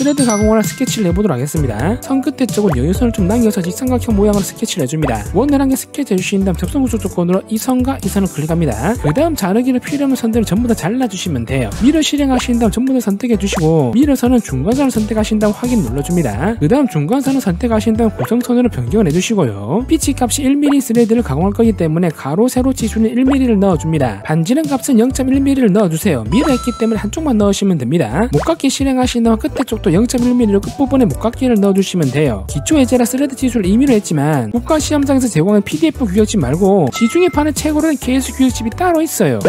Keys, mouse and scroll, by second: 0.4 click, 1.1 click, 1.7 click, 2.3 click, 3.2 click, 3.9 click, 4.4 click, 5.0 ctrl+right click, 5.9 click, 6.7 click, 7.2 click, 7.8 click, 8.2 click, 9.4 click, 10.0 click, 10.2 scroll down 2, 10.7 click, 11.0 scroll up 1, 11.3 click, 11.5 scroll down 2, 12.3 click, 12.9 click, 14.0 click, 14.7 click, 14.9 click, 15.4 click, 15.8 click, 16.6 click, 16.7 d, 20.3 click, 20.7 click, 21.1 1, 21.3 click, 22.3 click, 22.9 click, 23.3 click, 23.5 middle click, 23.8 1, 24.1 click, 24.6 middle click, 24.8 scroll up 1, 25.1 d, 25.7 click, 26.4 click, 27.8 1, 29.3 click, 31.4 click, 32.0 click, 33.2 scroll down 1, 33.5-33.9 scroll up 1, 34.7 click.